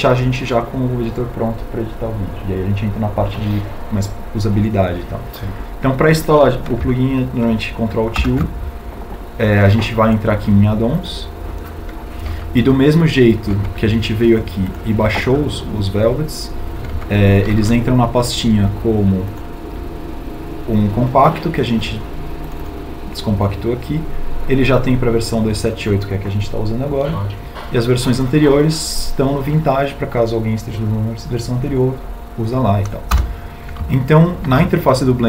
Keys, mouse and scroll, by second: 8.5 ctrl+alt+u.